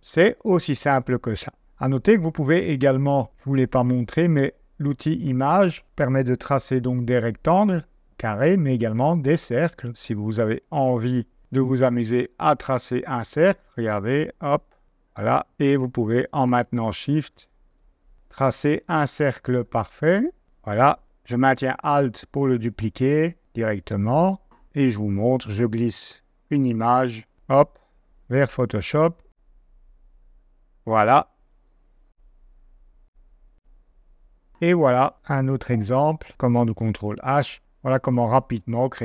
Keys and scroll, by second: 1.3 super+;, 25.2 super+Tab, 31.5 super+Tab, 35.6 v, 36.6 super+h.